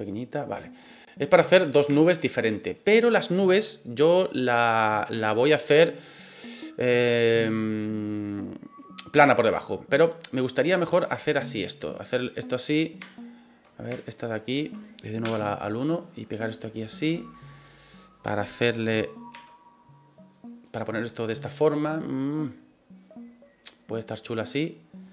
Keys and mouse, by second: 0.0 click, 0.3 right click, 1.9 shift+middle click, 9.6 middle click, 10.7 right click, 11.5 click, 12.6 right click, 13.1 shift+right click, 13.7 right click, 14.0 shift+right click, 14.4 shift+right click, 15.2 KP_1, 16.0-17.0 drag, 17.3 right click, 19.3 g, 20.3 click, 20.6 right click.